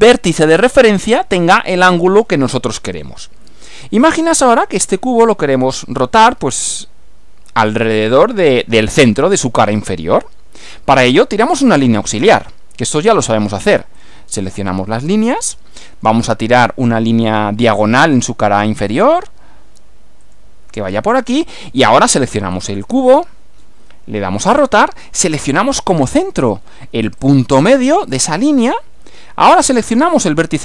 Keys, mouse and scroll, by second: 0.6 click, 14.0 click, 15.0-16.2 middle drag, 18.8 click, 20.2 click, 22.6 click, 24.4 click, 27.2 click, 28.2-30.2 middle drag.